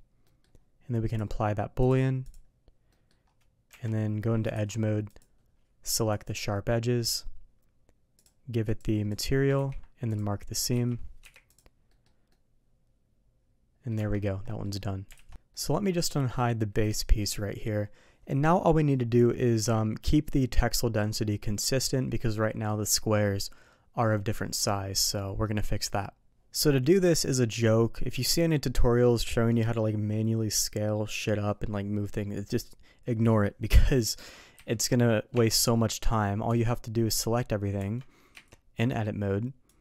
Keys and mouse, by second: 0.2 middle click, 1.9 click, 2.9 middle drag, 5.1-6.2 drag, 8.7 click, 11.2 u, 11.9 middle click, 12.3-13.9 middle drag, 13.9 Tab, 14.4 middle drag, 15.1 alt+a, 15.5 middle click, 16.8 click, 17.3-17.6 middle drag, 25.4 middle click, 34.2 middle click, 34.5 a, 35.3 Tab, 36.4 Tab, 37.1 a, 37.7 Tab, 38.3 a, 39.6 click.